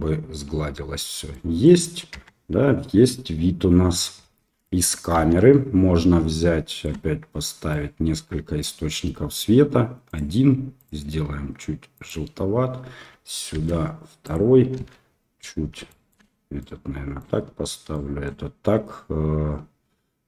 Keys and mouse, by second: 1.3 middle click, 1.5 click, 2.1 KP_0, 5.1 KP_7, 6.6 shift+middle click, 7.7 right click, 10.8 click, 13.5 shift+d, 14.7 KP_1, 15.8 shift+middle click, 16.6 right click, 17.9 right click.